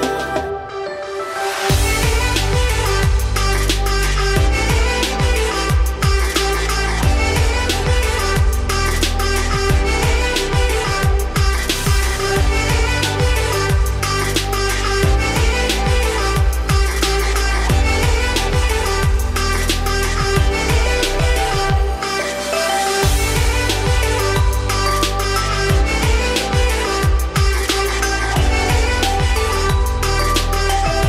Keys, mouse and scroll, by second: 0.3-2.6 scroll up 5, 0.6 shift+middle click, 1.2 click, 2.6 alt+x, 4.1 middle click, 4.3 scroll up 1, 5.2-7.6 right drag, 7.6-10.4 shift+drag, 11.3 click, 12.0 click, 13.0 alt+x, 15.2 click, 16.1-17.1 drag, 17.1 middle click, 18.1-19.7 shift+drag, 19.7-20.6 right drag, 20.6 middle click, 21.5 click, 22.2 click, 23.5 click, 24.0-24.7 middle drag, 24.7 click, 25.5 alt+x, 27.9 click, 29.0-30.4 shift+drag, 30.4 `, 30.9-31.0 scroll up 5.